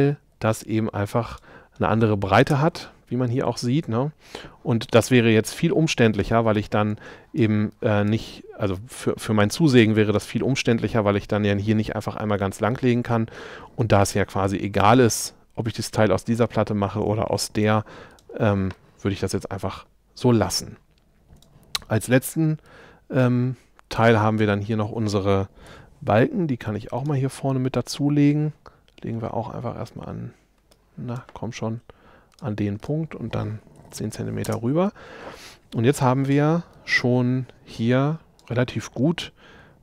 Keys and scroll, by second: 2.5 space, 25.7 m, 33.6-34.4 typing.